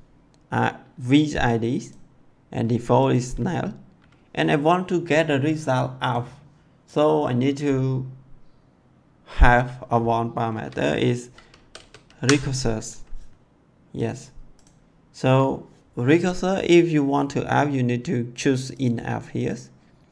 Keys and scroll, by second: 11.5 r, 11.7 e, 12.1 f.